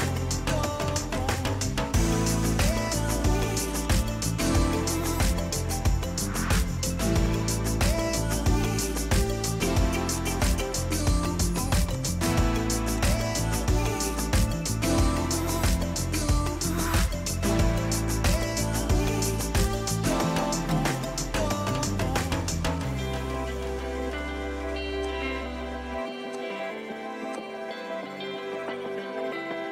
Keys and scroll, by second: 0.0-2.0 typing, 0.5 ctrl+a, 2.0 ctrl+h, 5.0 ctrl+c, 5.5 Escape, 7.4 p, 8.5-9.6 typing, 11.5 ctrl+g, 11.7-12.5 typing, 14.2-19.0 typing, 20.0 Escape, 23.2-24.2 typing, 25.7 Delete, 26.5 Delete, 28.8 ctrl+g.